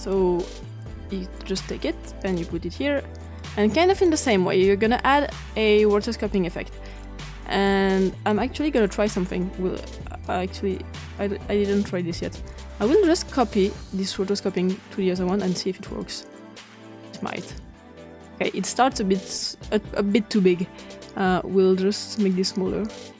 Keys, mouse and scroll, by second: 0.8-2.3 drag, 3.3 click, 6.9-8.3 drag, 10.1-11.7 drag, 12.4 click, 14.3-15.4 drag, 15.9-18.7 drag, 19.1 click, 21.1 click, 22.4 click.